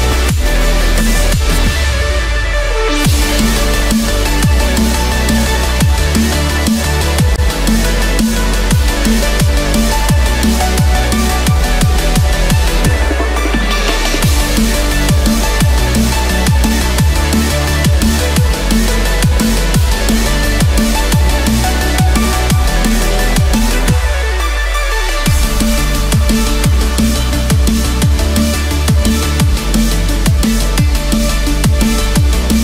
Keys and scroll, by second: 6.4 ctrl+-, 10.4 ctrl+=, 12.5 ctrl+=.